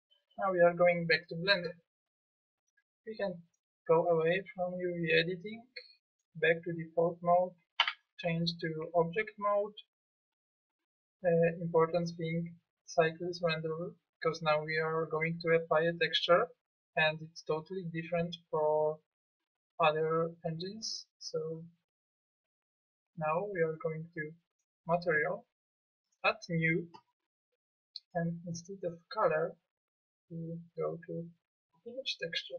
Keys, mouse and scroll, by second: 7.8 Tab, 13.5-17.4 drag, 23.3-24.5 drag.